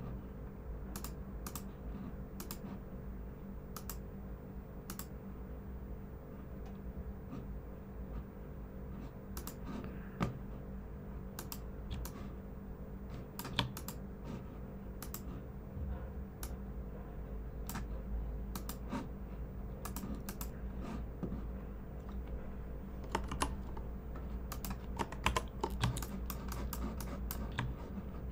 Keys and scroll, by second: 15.3 typing, 23.2 super+2, 25.2 super+=, 25.8-26.3 typing.